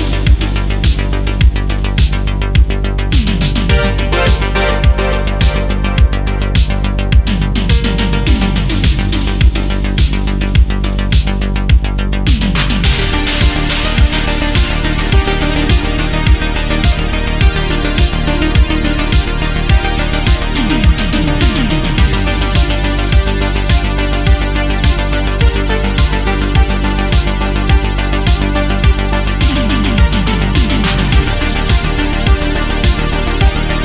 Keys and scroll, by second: 1.1 ctrl+z, 7.5 ctrl+z, 9.4 ctrl+z, 14.3 ctrl+z, 24.2 space, 25.1 space, 25.8 space, 28.5 ctrl+z, 29.1 space, 29.7 ctrl+z, 32.0 ctrl+z.